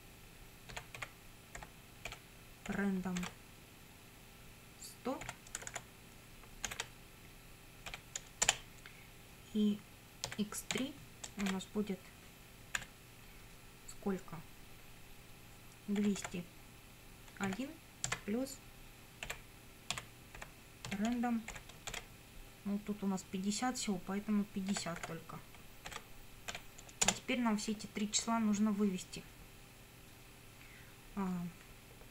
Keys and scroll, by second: 0.7-3.2 typing, 5.3 1, 5.6 0, 6.7 shift+0, 7.9 ;, 8.5 Return, 10.3 x, 10.7 3, 11.4 shift+;, 12.8 =, 15.7-17.5 typing, 19.3-22.4 typing, 24.7 5, 25.0 0, 25.9 shift+0, 26.5 ,, 27.1 Return, 32.0-32.1 typing.